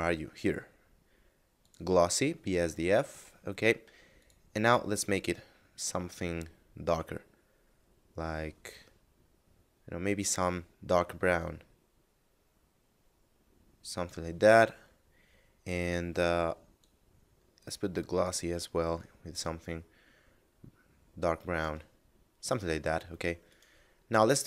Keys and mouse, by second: 4.1 click, 11.3 click, 16.0 click, 19.3 click, 23.3 right click.